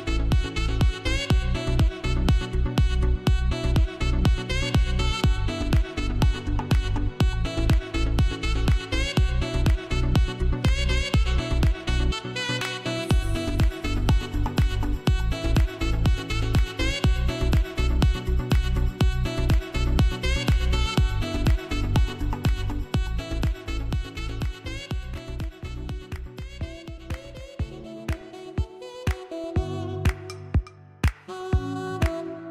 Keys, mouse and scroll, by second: 9.8 click, 9.8-12.4 drag, 13.7-17.5 drag, 18.0-27.9 drag, 27.9 scroll down 1, 32.3 scroll down 1.